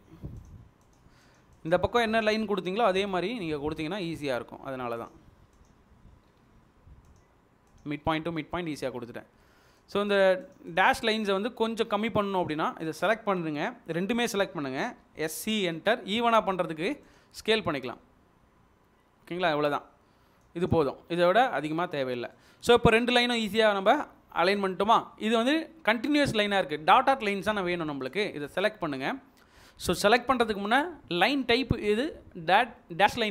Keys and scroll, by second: 1.3 Escape, 2.9 m, 8.0 Escape, 11.6 Escape, 14.9-16.0 typing, 21.0 Escape, 30.0 Escape.